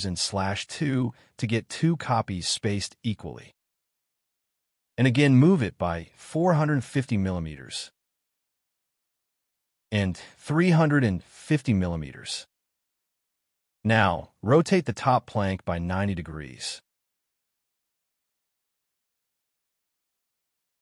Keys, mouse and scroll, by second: 0.7 /, 2.4 2, 2.8 Return, 4.2 m, 6.2 Up, 6.6-7.6 typing, 10.5-11.5 typing, 13.0-13.3 scroll up 1, 13.4 q, 16.1-17.4 typing, 16.8 scroll up 1, 18.6-19.0 scroll down 1, 19.5 scroll up 1, 19.8 space, 20.7 scroll down 1.